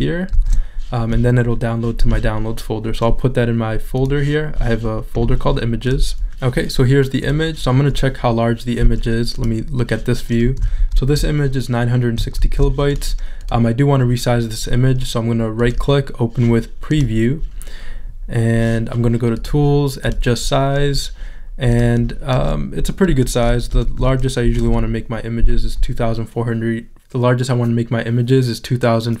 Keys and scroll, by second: 10.8 shift+super+z, 23.7 2.